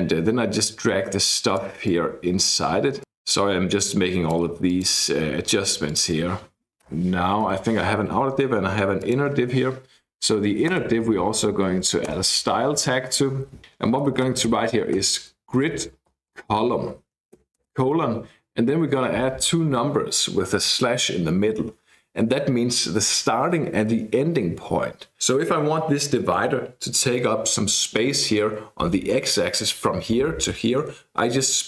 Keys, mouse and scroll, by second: 0.6-2.8 drag, 3.0-5.1 drag, 5.9 click, 6.9 BackSpace, 7.5 Down, 9.0 click, 10.0 Left, 10.7-12.1 typing, 13.8-17.6 typing.